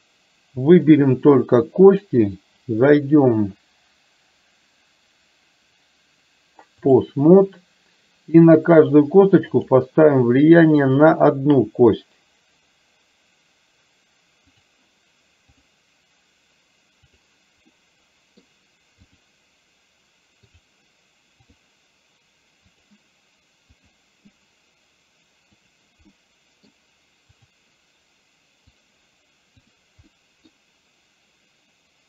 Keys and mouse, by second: 3.0-7.0 drag, 9.7 click, 14.5 click, 15.5 click, 17.2 click, 17.8-18.5 middle drag, 22.8 click, 26.2-26.8 middle drag, 27.5 click, 28.8 click, 30.2 middle click.